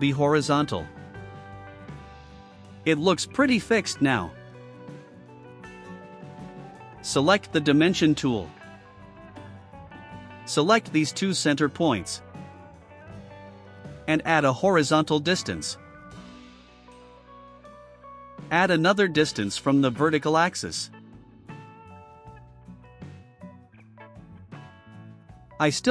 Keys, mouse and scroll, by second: 2.1-4.6 drag, 5.7 click, 9.2 click, 10.7 click, 12.0 click, 12.3 scroll down 1, 13.2 right click, 14.1 click, 15.0 1, 15.3 4, 16.1 Return, 18.4 click, 20.0 click, 21.6 9, 22.1 BackSpace, 22.7 8, 23.1 2, 23.7 Return, 24.6 middle click, 24.9 middle click, 25.7 right click.